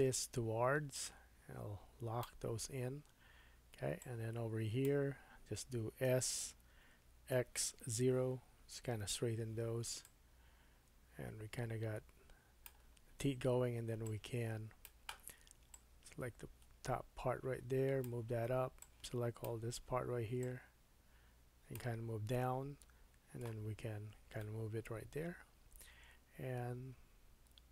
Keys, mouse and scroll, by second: 6.0 s, 22.3-23.4 middle drag, 24.4 middle click, 27.4 middle click.